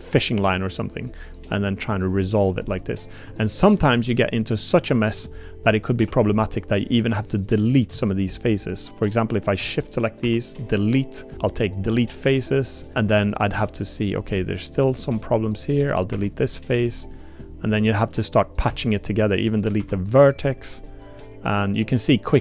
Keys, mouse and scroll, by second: 0.2 click, 0.4 g, 1.7 g, 2.7 click, 3.2 g, 4.2 click, 4.6 middle click, 6.1 3, 6.2 click, 7.3 click, 9.1 shift+click, 10.2 Delete, 12.4 click, 12.9 Tab, 12.9 click, 13.5 Tab, 14.3 click, 14.7 click, 15.2 click, 16.1 Delete, 17.1 click, 18.7 1, 19.8 Delete, 20.9 click, 21.9 click, 22.3 2.